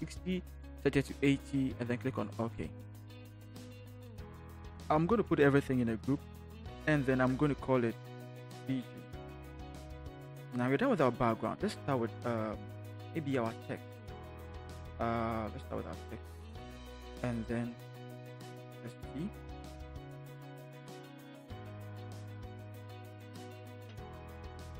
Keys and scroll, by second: 4.5 ctrl+h, 7.1 ctrl+shift+g, 8.3 Caps_Lock, 8.8 b, 9.0 g, 9.5 Return, 13.9 t.